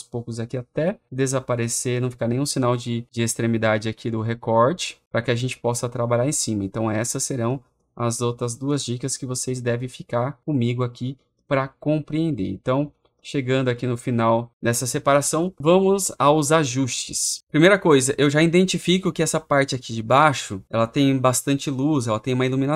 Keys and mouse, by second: 1.3 click, 3.1-22.7 drag.